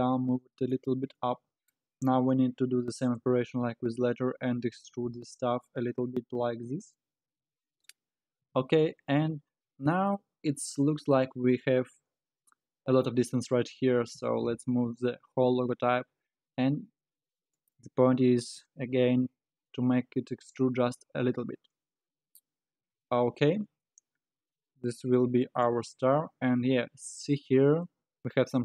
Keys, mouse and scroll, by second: 1.2-2.4 middle drag, 2.4 KP_3, 3.2 Tab, 3.8-4.7 scroll down 2, 4.7 e, 7.2 alt+z, 8.5 a, 8.9-9.5 scroll down 3, 9.5-10.1 scroll up 2, 10.1-12.2 scroll down 7, 14.1 g, 18.3-21.1 scroll down 5, 21.1-22.4 scroll up 9, 22.9 Tab, 23.4 alt+z, 23.8-26.0 middle drag, 26.0-27.4 scroll down 6, 27.4-28.6 scroll down 1.